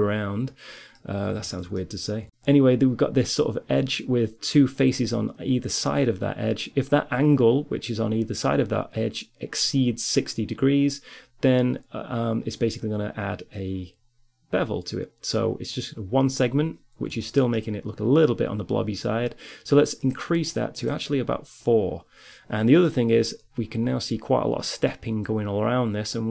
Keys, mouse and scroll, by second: 0.3-1.3 middle drag, 1.8 middle click, 2.3-8.8 middle drag, 17.2-18.9 middle drag, 19.2-22.4 drag, 22.4 middle click.